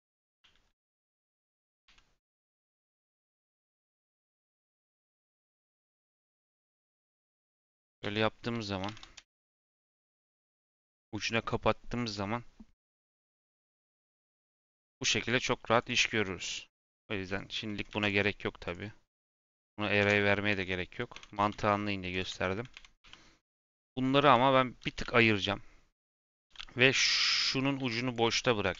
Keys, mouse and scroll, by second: 0.1 Tab, 0.3 a, 1.8 Tab, 2.3 x, 3.3 Tab, 3.6 3, 4.3 click, 5.0 l, 5.4 c, 6.2 x, 7.3 Tab, 7.7 r, 13.3 scroll down 2, 13.6 middle click, 13.8 scroll up 2, 14.2 shift+middle click, 14.4 scroll up 2, 14.7 scroll down 1, 15.6 click, 15.9 g, 17.2 click, 17.8 x, 18.6 click, 19.9 x, 20.4 Tab, 21.1 Tab, 21.3 g, 22.3 shift+middle click, 22.7 Tab, 22.9 3, 23.7 click, 24.1 l, 24.8 g, 26.4-27.0 scroll up 2, 26.4 3, 27.2 click, 27.9 shift+click, 28.3 x.